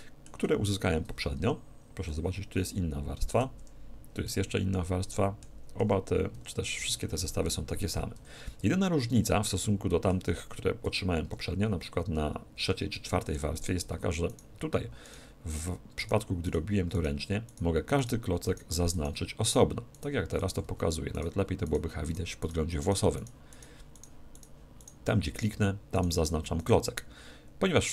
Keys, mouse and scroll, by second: 1.3 4, 2.1-4.0 middle drag, 3.6 3, 4.3-6.2 middle drag, 5.8 4, 6.3 5, 8.1 a, 8.6-10.4 middle drag, 10.8 4, 11.3 3, 12.6 4, 13.1-15.0 middle drag, 13.5-27.9 right drag, 20.6 z.